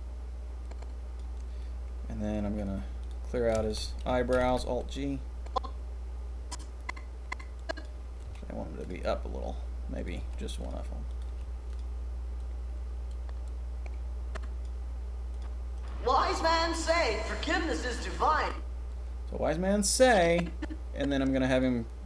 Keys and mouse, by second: 4.3 alt+g, 5.4-6.0 drag, 8.2 g, 8.7 click, 9.9 click, 10.1 g, 11.0 click, 11.2 g, 12.3-12.7 drag, 14.6-15.3 middle drag, 15.7 click, 18.3 click, 19.5-21.6 drag.